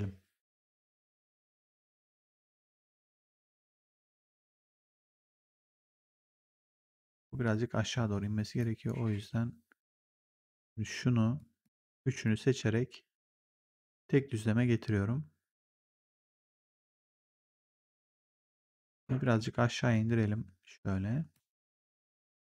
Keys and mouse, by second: 1.2 click, 2.3 click, 8.5 click, 10.3 click, 11.3 shift+click, 12.4 r, 13.1 click, 14.1 w, 18.9 click, 19.1 w, 19.8 click.